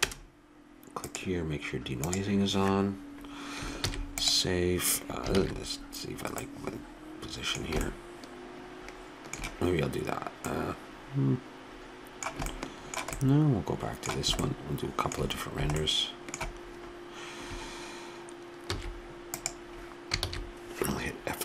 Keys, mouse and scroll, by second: 3.8 ctrl+s, 5.7 shift+z, 9.9 middle click, 14.7 middle click, 15.1 middle click, 19.0 ctrl+s, 20.4 shift+z.